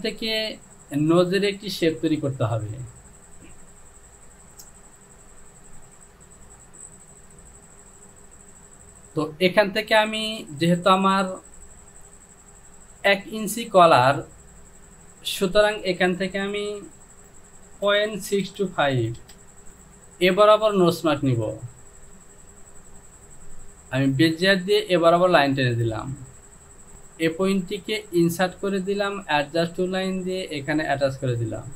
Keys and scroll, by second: 17.9-19.2 typing.